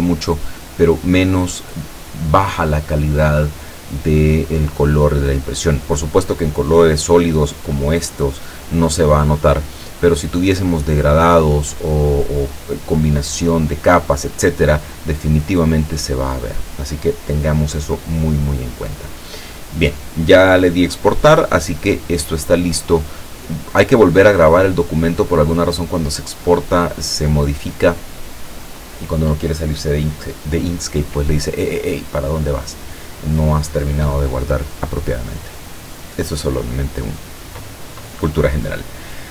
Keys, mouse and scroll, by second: 22.4 click, 26.6 click.